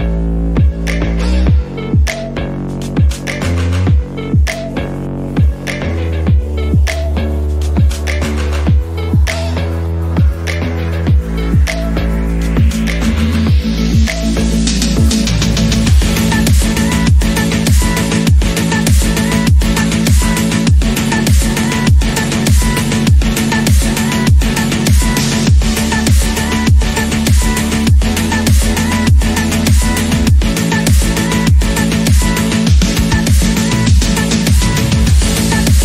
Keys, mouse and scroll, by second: 0.2 shift+click, 1.0 click, 2.4 shift+middle click, 3.2 click, 3.7 shift+middle click, 4.5 shift+click, 5.4 click, 6.4 click, 6.6 scroll down 2, 6.9 shift+middle click, 7.3 click, 8.5 shift+middle click, 8.9 scroll up 1, 9.3 shift+click, 10.0 x, 12.1 click, 13.4 scroll down 1, 13.6 shift+middle click, 14.0 scroll up 2, 14.4 shift+click, 15.4 click, 16.3 click, 16.5 scroll down 3, 16.8 shift+middle click, 17.2 alt+z, 17.6 Tab, 17.8 scroll down 1, 18.1 click, 18.3-18.6 scroll up 1, 18.6-19.2 scroll down 1, 19.3-20.2 shift+middle drag, 20.2 scroll up 2, 20.5 click, 20.6 Tab, 20.8-21.5 scroll down 4, 21.5 alt+z, 21.7-22.5 scroll up 6, 22.5-23.7 shift+middle drag, 23.7 click, 24.8 click, 25.8 click, 27.1 click, 28.0 click, 29.2 shift+click, 30.7 click, 31.3 shift+middle click, 31.8 shift+click, 32.5 click, 33.7 scroll down 1, 34.3-35.8 shift+middle drag.